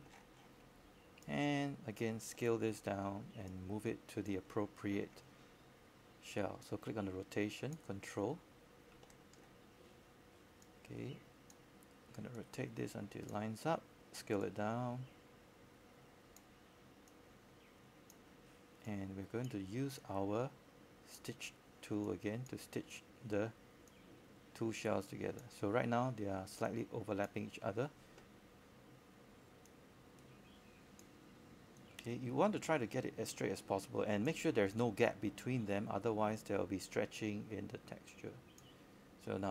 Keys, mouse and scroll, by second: 1.9-5.3 scroll up 1, 5.3 click, 7.6-8.5 scroll down 1, 8.5 click, 9.3 q, 12.6 right click, 13.8 click, 15.1 shift+click, 16.4 shift+click, 16.8 shift+click, 17.3 shift+click, 17.9 shift+click, 19.5 click, 21.8-22.4 scroll down 1, 23.5 click, 24.9-25.8 scroll up 1, 25.8 click, 26.8 scroll up 1, 29.0 click, 30.3-31.3 scroll up 1, 31.4 alt+middle click, 33.0-39.5 drag.